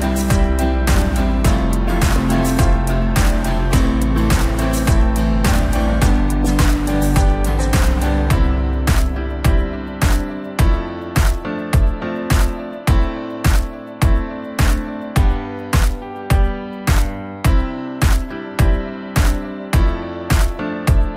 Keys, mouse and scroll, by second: 1.2-2.7 scroll up 1, 2.7-3.1 scroll up 1, 3.1 click, 3.8-5.1 scroll down 6, 5.1-5.4 drag, 5.4-7.5 scroll down 4, 7.5-8.7 drag, 8.7-10.9 middle drag, 10.9 ctrl+a, 13.0 KP_1, 13.9 scroll up 1, 15.4-15.8 drag, 15.8 scroll down 1, 16.0-17.7 middle drag, 17.7 click, 18.2 scroll down 2, 18.4-18.8 middle drag, 18.8-19.4 scroll up 1, 19.4-20.3 scroll up 1, 20.3 click.